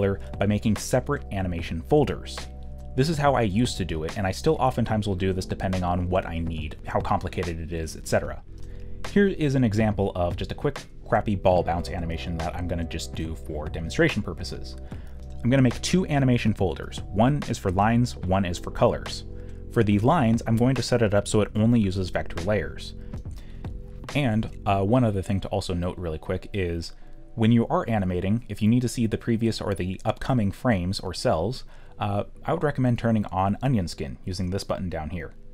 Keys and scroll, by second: 11.4-13.0 typing, 14.5-16.2 typing, 17.6 ctrl+d, 23.9 ctrl+z, 24.5 ctrl+z, 27.2 ctrl+z.